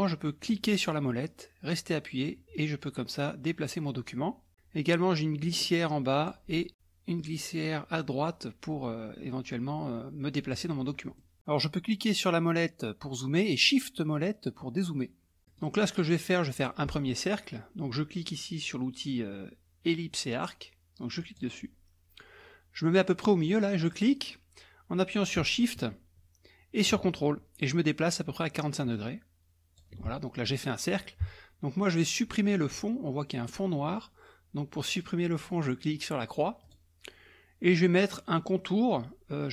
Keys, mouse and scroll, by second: 0.5-3.7 middle drag, 0.5-1.5 scroll up 1, 1.5-1.8 scroll up 1, 2.5-3.2 scroll up 1, 3.2 scroll up 1, 3.7-4.5 scroll down 1, 5.4-6.7 drag, 7.2-11.1 drag, 11.2-11.7 scroll up 1, 11.9 middle click, 14.5 shift+middle click, 14.7-15.0 shift+scroll up 1, 15.5 middle click, 21.2 click, 23.9-30.0 drag, 36.7 click.